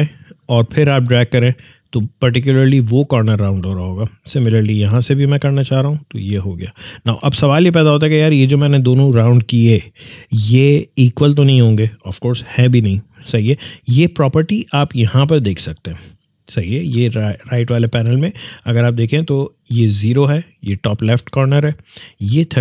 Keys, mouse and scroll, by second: 0.7-4.7 alt+drag, 4.7-9.4 alt+drag, 13.8-15.2 drag.